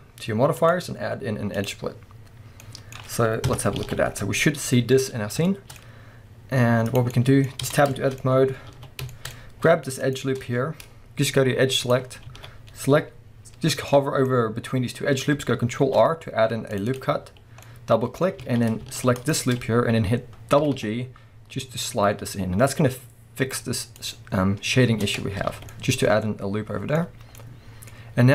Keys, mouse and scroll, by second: 0.6-2.6 drag, 2.6-6.9 middle drag, 3.5 KP_0, 3.8 alt+a, 4.1-5.2 scroll up 2, 5.2-5.5 scroll up 1, 5.8-6.9 scroll up 2, 6.9 click, 7.1-10.0 middle drag, 7.5 scroll up 2, 7.7 Tab, 8.2-8.7 scroll up 2, 8.7 alt+a, 9.3-10.0 scroll up 2, 10.0 alt+shift+click, 11.9 click, 12.1 scroll up 1, 12.3 alt+a, 13.9-17.0 middle drag, 15.8 ctrl+r, 17.0 click, 17.7-19.2 middle drag, 18.4 alt+a, 19.2 alt+shift+click, 20.6 g, 24.1 click, 24.9 Tab, 25.3 scroll down 1, 25.5 alt+a, 25.7-28.3 middle drag, 27.1-27.4 scroll down 2, 27.9-28.3 scroll down 2.